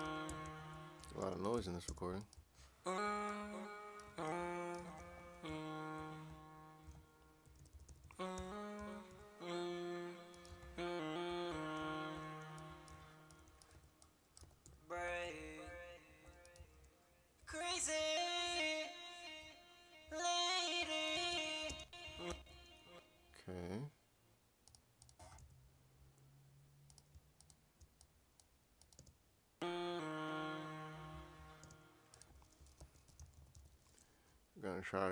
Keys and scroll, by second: 1.5 Tab, 1.9 space, 4.5-5.3 typing, 7.7-8.8 typing, 13.5-14.4 typing, 21.7 space, 22.3 alt+shift+d, 25.4 Return, 32.5-34.0 typing.